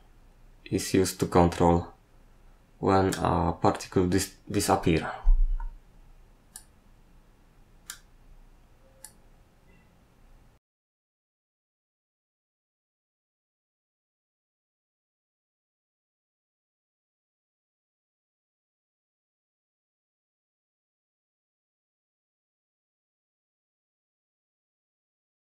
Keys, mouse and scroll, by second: 6.5 click, 9.0 click.